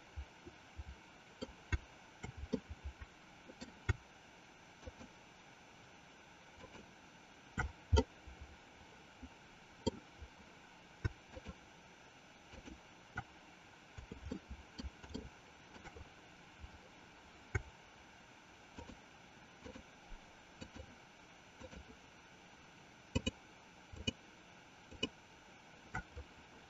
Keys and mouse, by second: 2.6-3.8 shift+middle drag, 4.8 shift+click, 6.4 shift+click, 8.0-10.0 middle drag, 11.4 shift+click, 12.4 shift+click, 14.4 middle click, 15.4 shift+middle click, 19.9 shift+click, 20.6 shift+click, 21.8 shift+click, 23.0 shift+click, 24.1 shift+click, 25.0 shift+click.